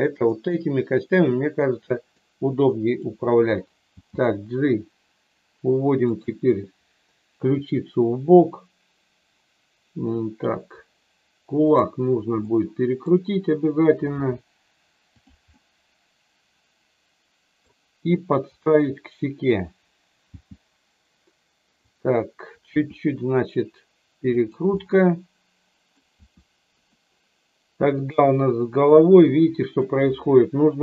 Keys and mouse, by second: 0.3-2.2 middle drag, 3.9 g, 11.6 click, 12.4 middle click, 14.1 r, 15.1 click, 15.5-17.7 middle drag, 20.3 g, 21.8 click, 22.8 r, 24.3 click, 24.8-25.9 middle drag, 26.1 r, 27.9 click, 28.9 middle click.